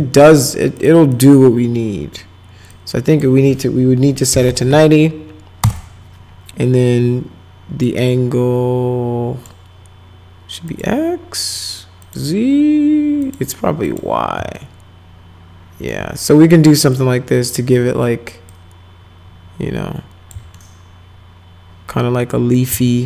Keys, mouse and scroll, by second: 0.0 ctrl+z, 0.8 click, 1.1 click, 2.7 click, 4.0-5.0 typing, 7.8-9.5 drag, 10.7 click, 12.0 click, 13.2 click, 13.9 click, 14.6-15.9 alt+middle drag, 17.0 click, 18.5-20.3 drag, 20.6-22.3 alt+middle drag, 22.5 middle click, 22.9 alt+middle click.